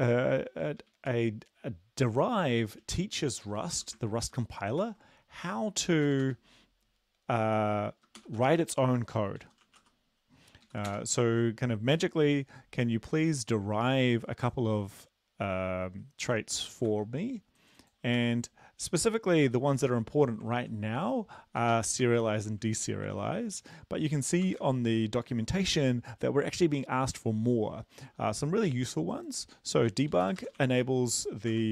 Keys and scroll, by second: 3.1 Home, 3.5 Return, 4.9 ctrl+v, 6.1 Return, 6.3 Return, 8.2 typing, 9.5-9.8 typing, 10.7 Down, 10.9 Return, 16.9 ctrl+c, 18.3 ctrl+v, 19.7 Delete, 20.5 ctrl+z, 21.7 Right, 22.2 shift+Home, 23.1 ctrl+c, 24.5 Return, 24.6 ctrl+v, 29.8 Right, 30.1-31.7 typing.